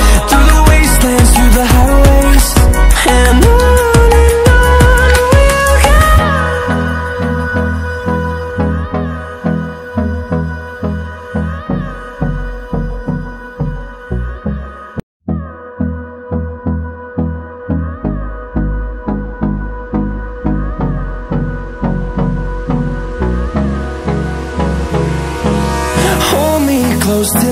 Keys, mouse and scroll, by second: 0.8-1.1 ctrl+alt+scroll down 1, 1.3 ctrl+alt+scroll up 1, 2.1-3.9 alt+drag, 3.9-18.4 drag, 18.4 right click, 20.5 ctrl+w, 23.3 ctrl+w, 24.1 click, 25.2 ctrl+alt+scroll up 1.